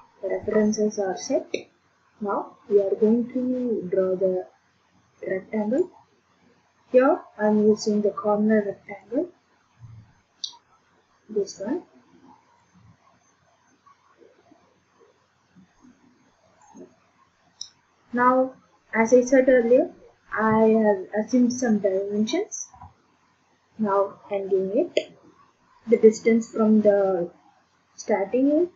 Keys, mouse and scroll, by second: 5.8 click, 9.0 click, 12.6 click, 16.6 click, 22.7 Escape, 25.9 click, 27.7 click.